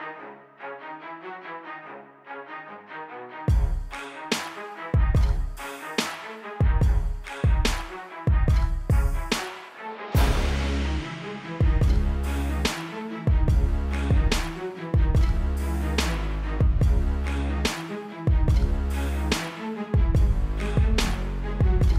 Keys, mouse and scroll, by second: 15.7 ctrl+Num_Lock, 15.7 click, 16.2 right click, 17.6 click, 20.8 click.